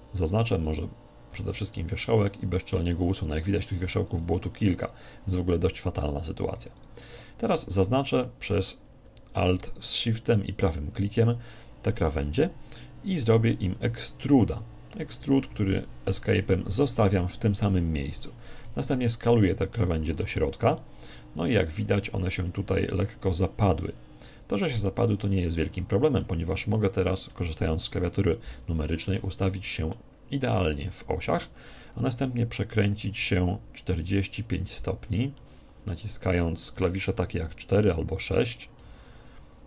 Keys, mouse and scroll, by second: 2.9-5.9 right drag, 6.8 right click, 13.7 e, 20.3 click, 20.8-22.5 middle drag, 22.8-24.5 middle drag, 25.3-27.1 middle drag, 27.3 KP_1, 29.1-31.7 middle drag, 31.7 click, 32.4 KP_6, 33.1 KP_4, 33.9 KP_4, 35.3-38.0 drag, 38.0 middle click, 38.1 click, 38.2 KP_4, 38.8 z.